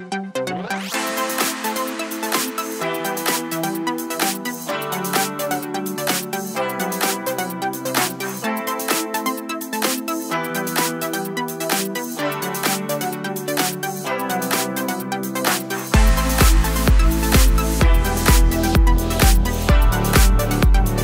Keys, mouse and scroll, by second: 0.1 middle click, 0.2 3, 0.5 alt+click, 1.1 shift+click, 1.3 shift+click, 1.8 shift+click, 2.1 shift+click, 3.5 click, 3.7 Tab, 4.3 click, 4.8 click, 5.3 scroll down 1, 5.7-6.6 shift+middle drag, 5.9 scroll down 2, 6.3-6.6 scroll up 2, 6.6 click, 7.0-8.7 middle drag, 8.0 scroll down 2, 8.7-9.9 drag, 9.7 ctrl+s, 9.9-11.5 middle drag, 11.5-12.7 drag, 12.7-14.4 middle drag, 14.4 click, 14.7 click, 15.4-16.4 shift+middle drag, 15.6 scroll up 2, 15.8 Tab, 16.4 click, 16.7 click, 17.5 Tab, 17.7 scroll down 2, 17.9 click, 18.2-18.9 scroll up 2, 18.9 shift+middle click, 19.1-19.4 scroll up 1, 19.7 click, 20.3 click.